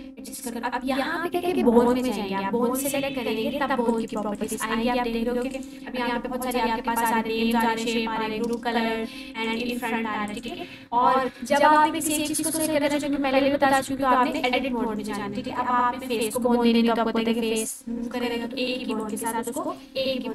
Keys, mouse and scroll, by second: 1.8 click, 9.3 click, 11.1-11.8 scroll up 1, 11.8-12.7 click, 12.8-13.5 typing, 14.3 click, 14.6-15.6 typing, 14.6 scroll down 1, 18.9 click.